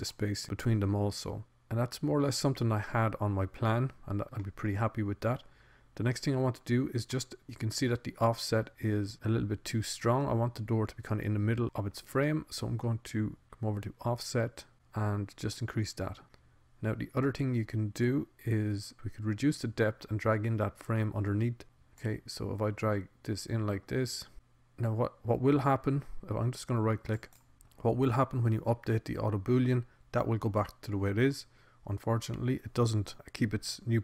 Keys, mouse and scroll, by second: 2.6-4.0 middle drag, 4.8 middle click, 9.2-11.0 middle drag, 11.2 middle click, 15.2 click, 23.4 click.